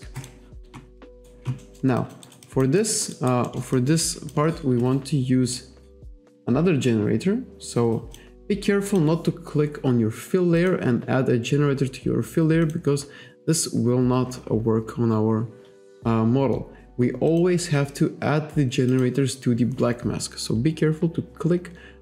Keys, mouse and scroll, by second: 0.2 click, 1.1 alt+right click, 1.7 alt+middle click, 2.0 alt+click, 2.3 alt+right click, 2.5 alt+click, 3.2 alt+right click, 3.5 alt+middle click, 5.5 click, 8.2 click, 8.9 click, 10.6 click, 12.7 click, 17.4 click, 19.0 click.